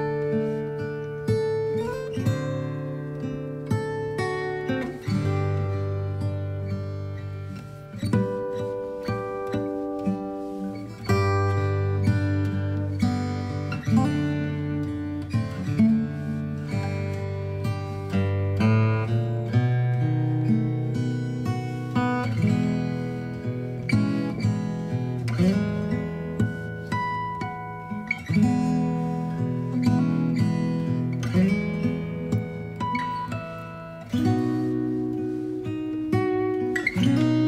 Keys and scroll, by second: 15.6 space, 16.6 alt+b, 17.3 alt+x, 25.4 space, 26.4 v, 28.0 space, 36.0-36.4 typing.